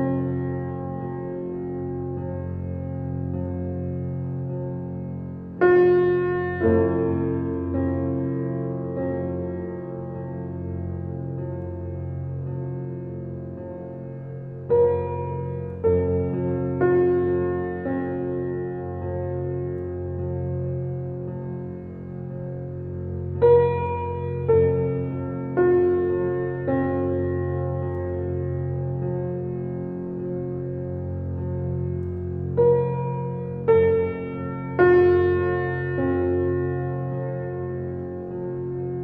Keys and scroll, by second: 0.6 shift+4, 2.1 [, 6.1 [, 19.4 space, 31.2 Delete.